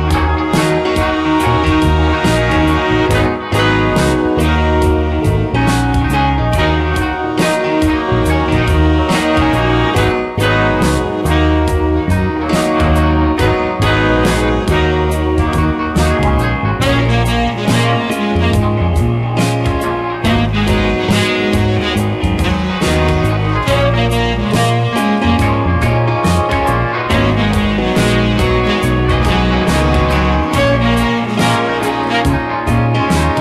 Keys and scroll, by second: 1.3 space, 5.0 space, 11.0 space, 17.0 space, 26.9 space.